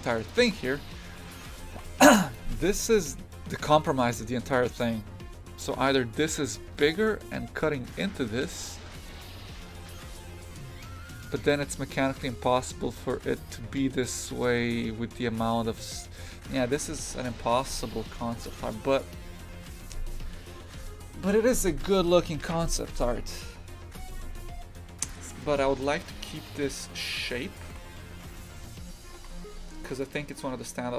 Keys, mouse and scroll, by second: 0.3 click, 0.4 shift+f, 16.9 click, 17.5 shift+f, 25.1 click, 27.5 click, 27.7 shift+f.